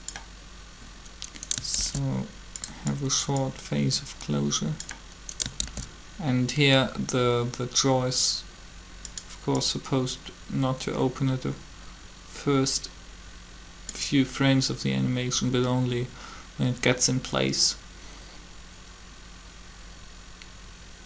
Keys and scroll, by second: 1.8 shift+d, 5.6 shift+d.